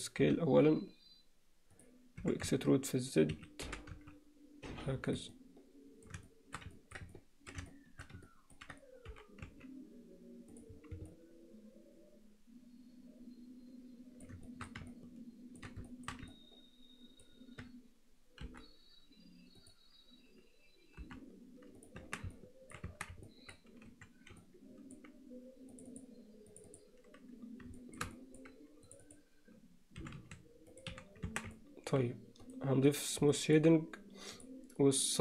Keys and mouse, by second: 2.2 s, 2.2 e, 3.6 g, 5.4 middle click, 6.3 alt+shift+middle click, 6.8 ctrl+middle click, 7.2 middle click, 7.7 alt+shift+middle click, 8.3 ctrl+alt+middle click, 9.1 g, 11.1-14.2 alt+middle drag, 14.5 alt+shift+middle click, 14.9 ctrl+alt+middle click, 15.9 alt+shift+middle click, 16.4 ctrl+middle click, 18.5 i, 21.0 i, 22.0 Tab, 22.4-22.8 middle drag, 23.2 Tab, 23.3 alt+middle click, 23.9 2, 24.4 middle click, 26.0 click, 26.7 click, 27.8 shift+middle click, 28.2 middle click, 28.9 click, 30.0 e, 31.0 f, 31.3 Tab, 31.6-32.0 middle drag, 32.7 right click, 33.4 middle click, 34.4-35.2 drag.